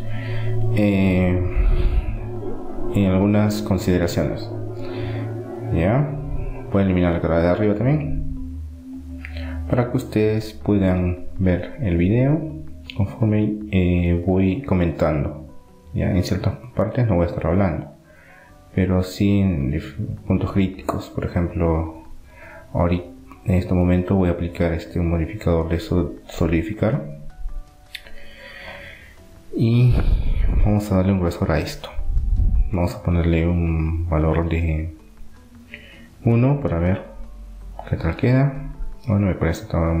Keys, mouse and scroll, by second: 4.7-6.4 middle drag, 6.7 middle click, 7.1-9.4 right drag, 8.4 Delete, 9.7-12.1 middle drag, 15.7-17.4 drag, 17.7-19.7 middle drag, 19.7-21.7 drag, 23.4-26.2 drag, 29.4-30.4 middle drag, 32.4-33.6 middle drag, 33.6-35.4 drag, 35.1 BackSpace, 38.1 middle click, 39.3 middle click.